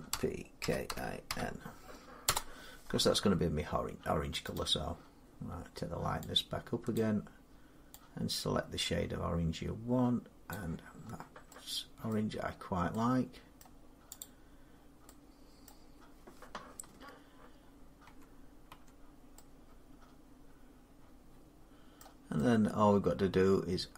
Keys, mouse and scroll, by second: 0.0-1.1 typing, 2.1 Return, 4.4 click, 6.8 click, 10.3 click, 10.7 scroll down 3, 12.0 middle click, 12.3-12.7 scroll up 3, 13.4 middle click, 14.0 click, 14.5 scroll down 1, 14.9 middle click, 15.5 middle click, 17.1 scroll up 1, 17.9 Tab, 18.5 Tab, 21.1 scroll, 21.8 middle click.